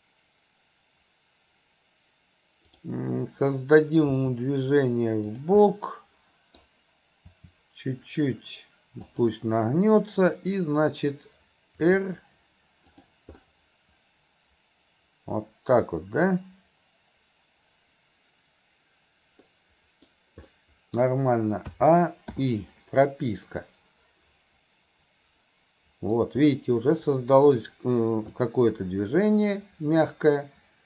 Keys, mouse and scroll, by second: 2.7 click, 5.8 middle click, 10.3 click, 19.5-23.7 middle drag, 23.7-26.2 drag, 26.5-27.6 middle drag, 28.4-30.8 drag.